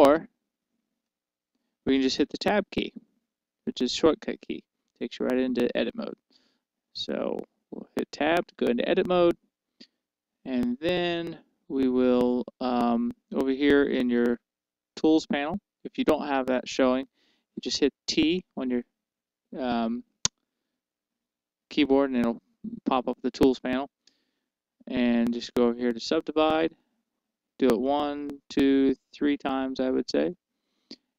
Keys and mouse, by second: 4.1 Tab, 20.6 t, 24.6 t, 28.2-31.1 drag.